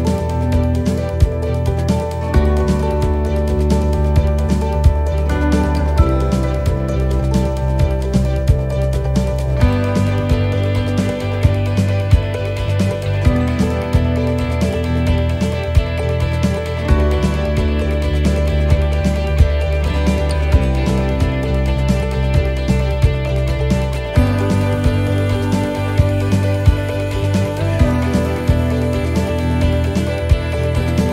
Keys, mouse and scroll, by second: 1.8 ctrl+z, 2.0 middle click, 3.3 click, 6.8 right click, 7.8 l, 8.8 click, 11.8 middle click, 13.5 right click, 14.2 l, 15.3 click, 17.7 middle click, 18.1-18.4 scroll down 2, 18.4 middle click, 19.2-19.7 scroll up 2, 19.6 middle click, 21.3 right click, 22.0 ;, 22.4 l, 24.0 click, 26.7 right click, 28.3 click, 30.5 l.